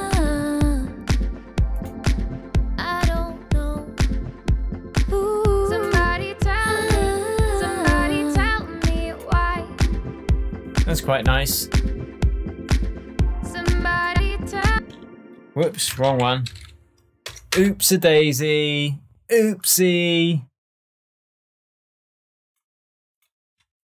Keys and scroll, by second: 14.7 space, 15.9-17.2 typing, 17.5 Return.